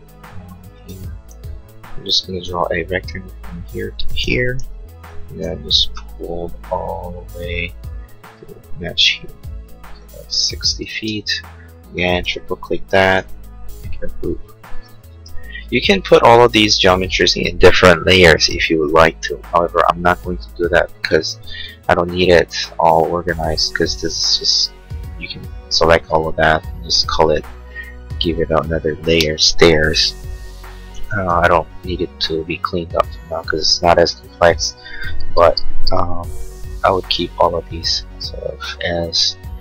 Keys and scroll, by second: 0.7 r, 4.6 p, 10.9 space, 13.2 g.